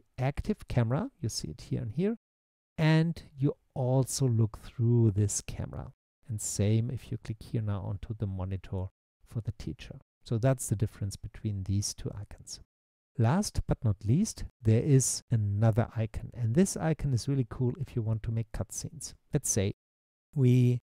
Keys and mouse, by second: 8.6 click.